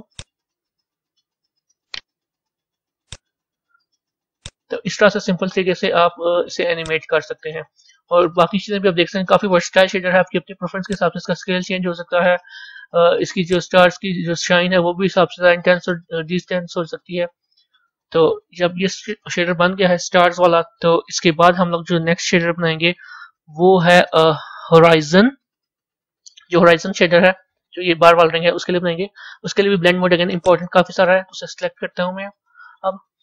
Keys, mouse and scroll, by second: 0.1-4.3 right drag, 4.3-9.0 drag, 9.0-10.8 middle drag, 10.8-16.5 drag, 30.3 click.